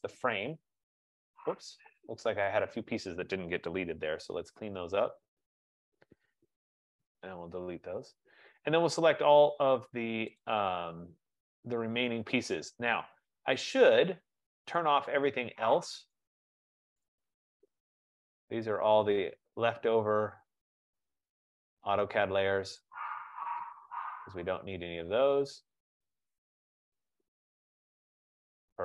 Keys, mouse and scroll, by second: 0.2 click, 1.4-2.1 scroll, 2.3 click, 5.6 shift+click, 6.7 d, 7.0 Delete, 9.2 scroll, 9.9-10.3 scroll, 10.6 click, 11.9 scroll, 16.2 click, 17.2 click, 18.0 click, 18.7 click, 19.6 click, 20.1 click, 20.8 click, 21.9 click, 22.4 click, 22.9 click, 23.9 click, 24.5 click, 25.3 click, 26.0 click, 26.7 click, 28.0 click, 28.4 click.